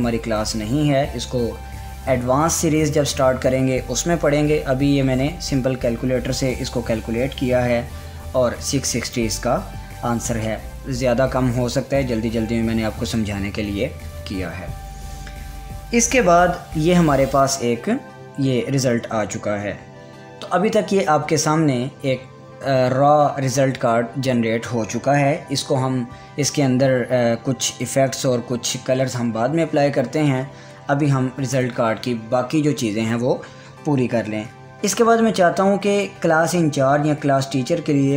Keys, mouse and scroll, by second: 32.1 Return.